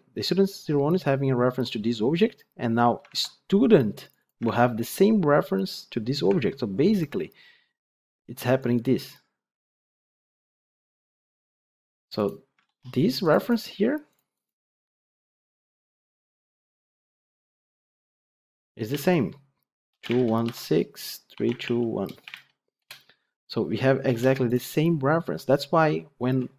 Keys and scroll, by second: 3.0 ctrl+Tab.